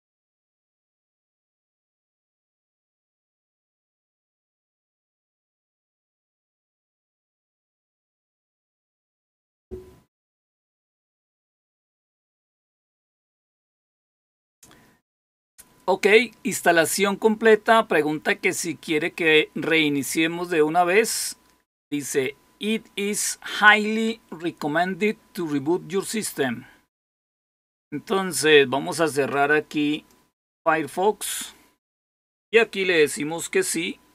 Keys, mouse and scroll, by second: 27.4 click, 29.8 click, 31.8 click, 32.3 click.